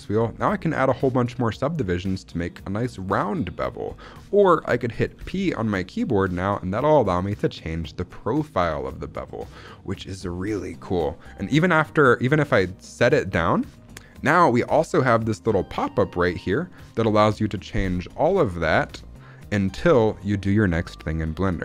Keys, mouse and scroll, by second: 0.7-2.6 scroll up 1, 5.1 p, 13.1 click, 16.1 click, 17.9 scroll down 1, 18.3 shift+middle click, 18.7-19.1 scroll up 1, 21.3 scroll up 1.